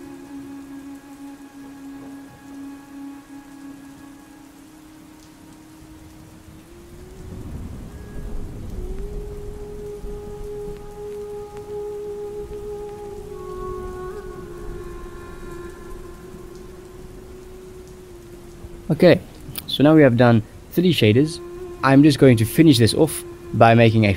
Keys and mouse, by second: 0.3 middle click, 1.9-2.3 drag, 2.8 click, 3.6 click, 5.6 shift+middle click, 6.7 ctrl+shift+click, 7.2 middle click, 7.7 ctrl+s, 11.2-12.3 drag, 12.7 click, 15.1 click, 17.1 click, 17.8 middle click, 18.3 middle click, 18.8 middle click, 19.6-20.6 drag, 21.3 ctrl+s, 21.9 shift+click, 22.9 middle click, 23.8 click.